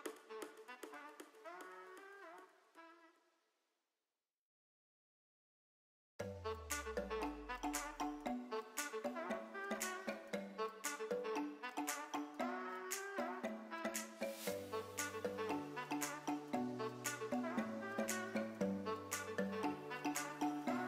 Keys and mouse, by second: 0.7 alt+s, 3.3 click, 4.2 KP_1, 4.8 g, 5.0 z, 6.4 click, 7.3 s, 7.4 z, 8.4 click, 8.9 g, 9.0 z, 10.4 click, 10.8 Tab, 11.9 g, 12.0 z, 12.8 click, 13.4 KP_3, 14.1 r, 15.3 g, 15.9 click, 16.3 r, 16.8 click, 17.4-18.2 middle drag, 18.7-19.0 shift+middle drag, 19.3 Tab, 19.9 middle click.